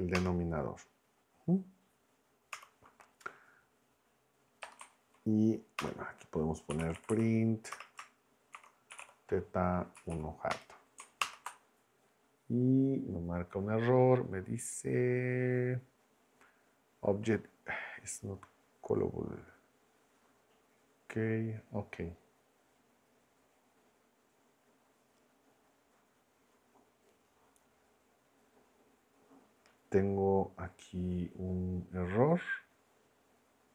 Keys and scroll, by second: 0.0-0.1 typing, 0.1 Return, 2.5 Return, 4.6 BackSpace, 5.8 Return, 6.4-9.5 typing, 7.7 Return, 10.0 Down, 10.5 Return, 11.2 ctrl+Return.